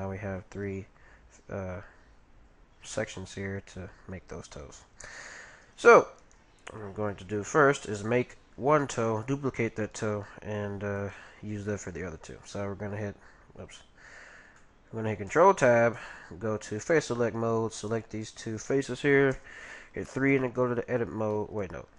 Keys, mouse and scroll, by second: 4.9-7.7 middle drag, 6.2-8.1 right drag, 7.1 g, 9.7-11.5 right drag, 10.1 g, 12.0 ctrl+v, 14.6-16.5 middle drag, 15.3 ctrl+t, 17.7-19.9 right drag, 18.7-20.8 middle drag, 21.3-21.9 middle drag.